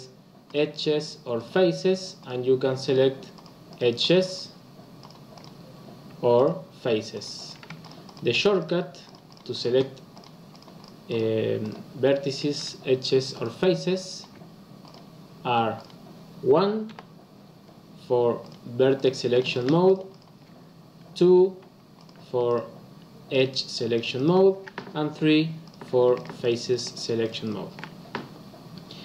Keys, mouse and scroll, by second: 0.4 click, 1.3 click, 2.1 click, 2.8 click, 3.3 click, 3.7 click, 3.9 click, 4.2 click, 4.9 click, 5.3 click, 6.3 click, 7.1 click, 7.3 click, 7.7 shift+click, 8.0 shift+click, 8.3 shift+click, 8.5 shift+click, 9.0 shift+click, 9.2 shift+click, 9.5 shift+click, 10.1 shift+click, 10.4 shift+click, 10.8 shift+click, 11.0 shift+click, 11.6 shift+click, 13.2 shift+click, 13.9 shift+click, 14.8 click, 15.7 click, 16.8 1, 18.3 click, 18.9 click, 19.4 shift+click, 19.8 shift+click, 20.1 shift+click, 21.2 2, 21.9 click, 22.4 shift+click, 23.2 shift+click, 23.9 shift+click, 24.1 shift+click, 25.1 3, 25.6 click, 26.1 shift+click, 26.4 shift+click, 26.7 shift+click, 26.9 shift+click, 27.2 shift+click, 27.4 shift+click.